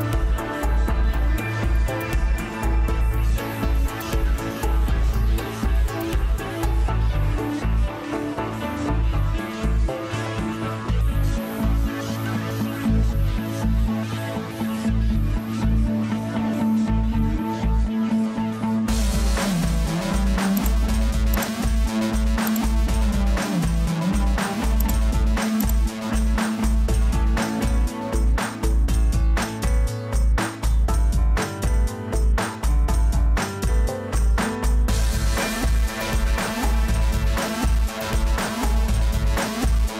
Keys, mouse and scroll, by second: 15.1 ctrl+1, 16.4 ctrl+2, 17.1 ctrl+3, 17.9 ctrl+4, 18.5 ctrl+5.